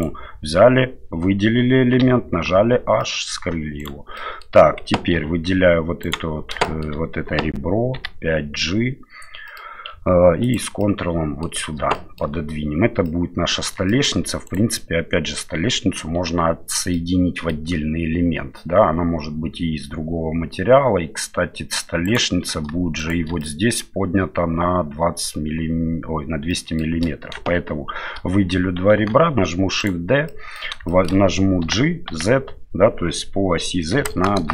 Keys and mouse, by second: 2.0 h, 3.0 middle click, 3.8 right click, 4.2 middle click, 5.1 2, 6.0 right click, 6.6 shift+middle click, 7.9 g, 10.8 middle click, 11.9 shift+middle click, 13.0 middle click, 13.9 shift+middle click, 14.4 right click, 16.9 middle click, 22.0 right click, 23.0 shift+right click, 23.4 middle click, 26.5 shift+middle click, 29.0 shift+d, 30.2 middle click, 30.8 middle click, 31.6 g.